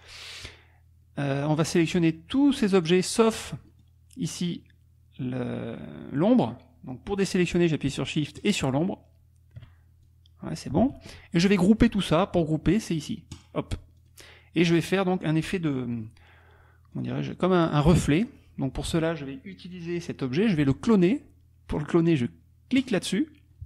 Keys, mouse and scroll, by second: 0.4 click, 2.0 click, 3.8 middle click, 8.4 shift+click, 10.1 shift+click, 10.8 ctrl+z, 13.3 click, 14.1 click, 17.0 click, 18.2 click, 22.8 click.